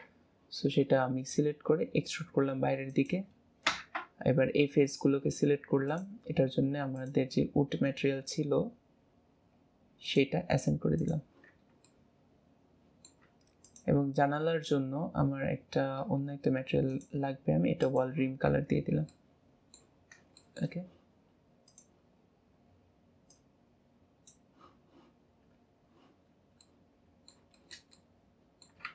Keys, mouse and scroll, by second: 1.6 e, 3.6 ctrl+KP_Add, 5.8-10.0 drag, 11.0 click, 11.4 Tab, 11.8-13.2 middle drag, 13.2 Tab, 13.6 click, 15.2-16.0 scroll down 3, 16.0-16.8 scroll up 4, 16.8 click, 17.8 click, 18.4 Tab, 18.8 scroll down 2, 19.1-20.0 middle drag, 20.0 scroll up 1, 20.0-20.4 scroll down 1, 20.4-21.6 shift+middle drag, 21.6 click, 25.3-26.2 scroll down 4, 26.2-26.6 scroll down 3, 26.6-28.9 middle drag.